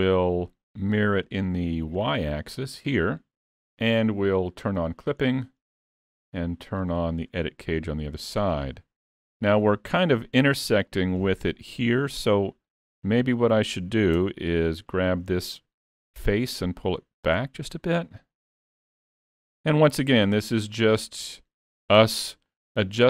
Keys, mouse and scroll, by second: 1.1 click, 3.3-3.8 scroll down 3, 4.8 click, 5.3 scroll up 1, 6.8 scroll up 5, 6.8 click, 7.4 middle click, 8.5-9.3 scroll up 4, 8.8 shift+middle click, 9.3 middle click, 10.9 middle click, 11.0 shift+middle click, 13.4 click, 14.3 Tab, 14.6 3, 14.9 click, 15.2 middle click, 17.3 click, 20.4 middle click, 22.1 Tab, 22.5 click.